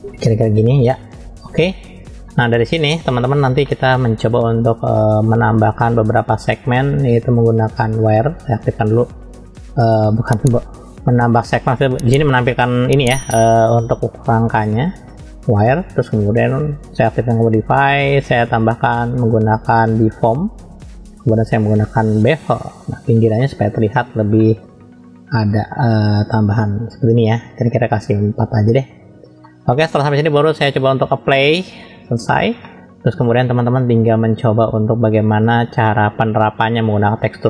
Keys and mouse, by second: 1.2 click, 2.3 middle click, 3.6-4.1 middle drag, 5.9 click, 6.3 click, 7.4-14.6 drag, 17.1 click, 18.8-22.3 drag, 23.4-23.7 shift+middle drag, 24.4 shift+middle click, 27.2 click, 29.4-31.1 middle drag, 31.1-31.8 drag, 32.6 middle click, 35.7-37.2 drag.